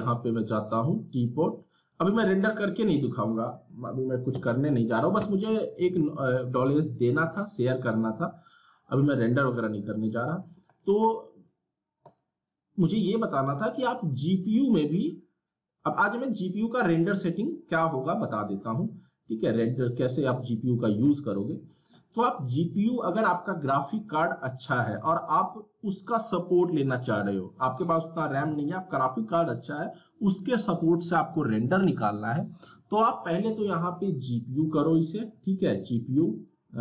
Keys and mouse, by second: 1.2 click, 2.3 right click, 2.7-4.3 middle drag, 4.3 z, 6.3-11.3 drag, 15.8-23.3 drag, 34.4 click.